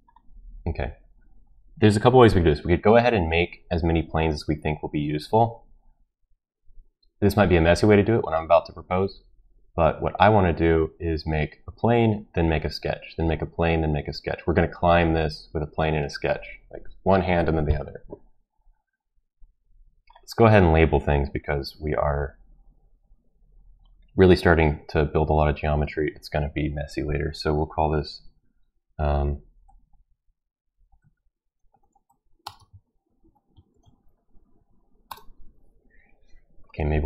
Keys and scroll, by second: 30.6-34.5 typing, 35.1 Return.